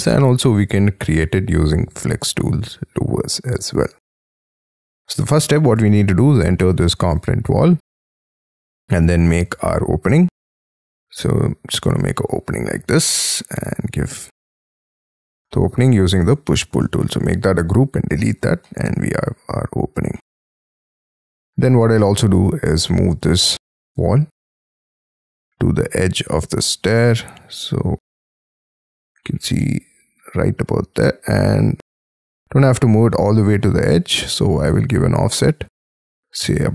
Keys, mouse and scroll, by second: 4.5 middle click, 5.6 double click, 7.1 double click, 7.5 j, 8.6 r, 11.8 space, 12.7 p, 14.3 space, 14.8 double click, 15.3 middle click, 16.5 middle click, 16.8 g, 17.7 Delete, 18.1 middle click, 18.6 middle click, 18.9 Escape, 19.5 Escape, 20.1 middle click, 21.1 scroll up 6, 21.6 double click, 23.3 double click, 23.6 p, 24.6 j, 29.6 middle click, 30.9-32.2 scroll up 12, 31.7 t, 32.2 scroll down 7, 32.7 shift+middle click, 34.0 scroll up 5.